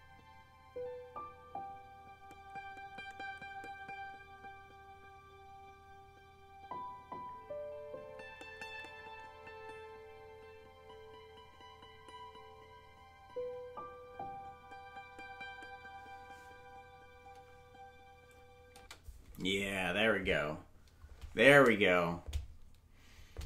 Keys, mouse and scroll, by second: 18.7 space.